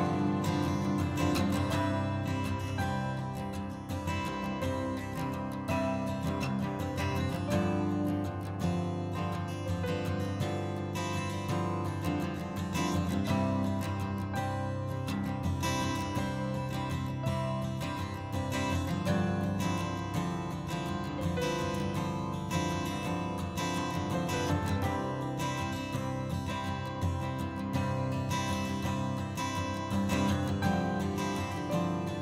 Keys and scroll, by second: 19.4 alt+F7, 31.6 ctrl+z.